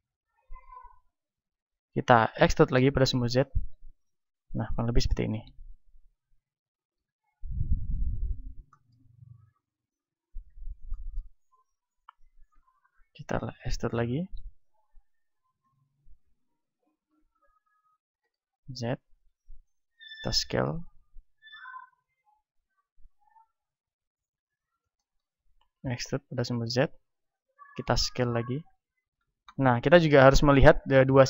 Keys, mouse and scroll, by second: 0.6-2.8 drag, 2.1 e, 4.1-6.0 drag, 6.8 r, 8.0-12.5 drag, 12.5-14.4 middle drag, 12.5 e, 15.6-18.3 drag, 16.3 ctrl+z, 16.9 e, 19.8-20.8 drag, 20.2 s, 25.6 e, 27.3-31.0 drag, 28.0 s, 31.0-31.2 middle drag.